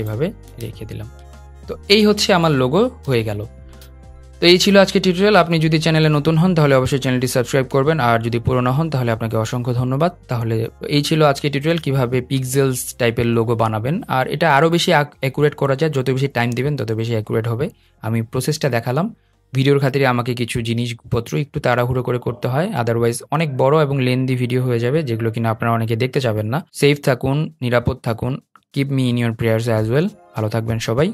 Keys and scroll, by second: 2.7 super+0.